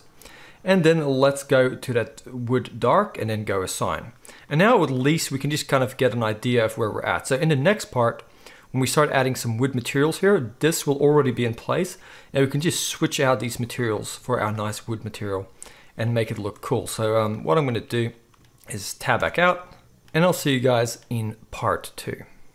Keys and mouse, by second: 12.7-13.1 middle drag, 13.1 click, 13.2-22.5 middle drag, 19.2 Tab, 20.0 alt+a.